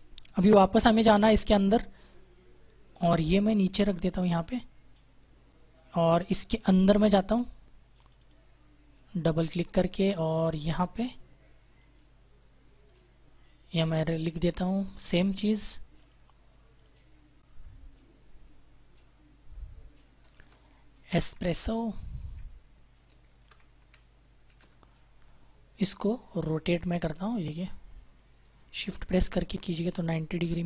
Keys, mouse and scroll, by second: 3.0 click, 7.9 click, 10.9 click, 14.7 click, 15.9 click, 20.2 shift+e, 21.7-25.0 typing, 22.8 Return, 26.2 click, 30.3 Return.